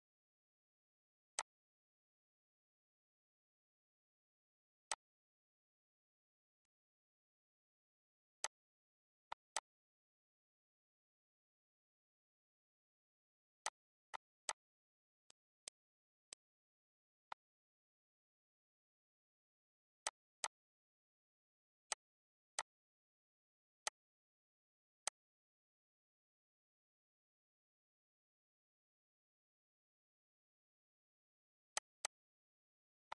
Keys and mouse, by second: 1.3 click, 4.8 click, 6.5 click, 8.3 click, 9.2 click, 11.9 ctrl+s, 13.6 click, 14.1 shift+click, 15.2 click, 16.2 shift+click, 17.2 click, 19.9 click, 21.8 click, 22.5 shift+click, 23.7 click, 24.5 ctrl+d, 25.0 click, 28.9 ctrl+d, 29.3 ctrl+d, 30.0 ctrl+d, 31.1 ctrl+d, 31.7 click, 33.0 click.